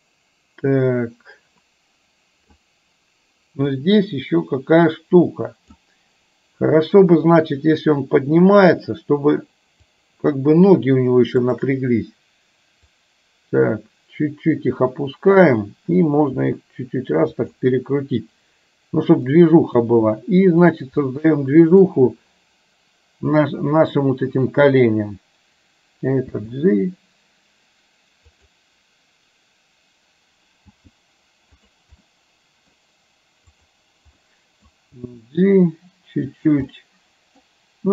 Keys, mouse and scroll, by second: 3.9 click, 9.9 click, 11.5 shift+click, 13.1 click, 13.9-15.5 drag, 16.5 r, 19.4-19.9 middle drag, 21.1-21.9 middle drag, 26.4 d, 28.4 click, 30.7 g, 31.7 drag, 32.1-32.7 middle drag, 33.6 click, 34.4-34.7 middle drag, 35.0 g, 36.7-37.5 middle drag, 36.7 scroll up 1.